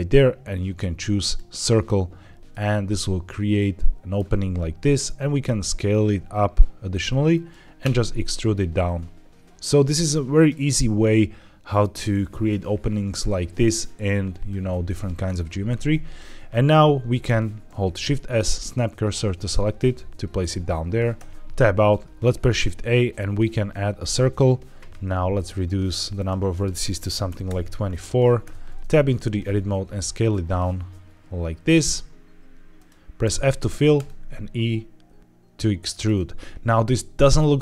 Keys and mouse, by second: 2.4-4.1 middle drag, 4.9 s, 7.2 click, 7.7 e, 10.2 click, 10.6-11.7 middle drag, 17.6 shift+s, 21.1 Tab, 22.3 shift+a, 25.3 click, 26.0-27.5 drag, 28.3 Tab, 29.1 s, 32.6 click, 33.1 f, 33.8 e, 35.8 click, 37.3 Tab.